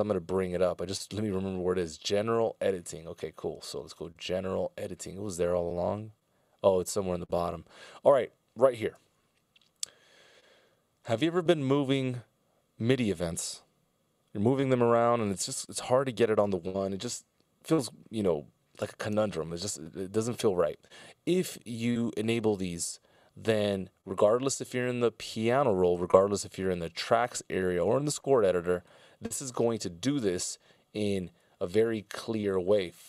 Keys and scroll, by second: 8.9 ctrl+alt+super+m, 30.6 ctrl+alt+super+m.